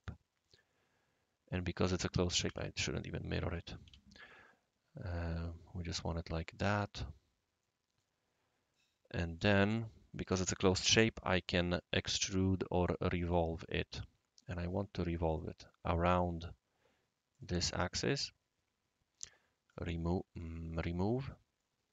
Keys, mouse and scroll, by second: 0.0-1.9 right drag, 2.4 ctrl+z, 3.8 ctrl+z, 5.3 click, 5.6 click, 6.6 click, 7.1 scroll down 1, 7.6 middle click, 8.7-9.4 right drag, 13.2 click, 15.3 click, 17.3 click, 19.6 click, 20.4 click, 20.7 click, 21.6-21.9 right drag.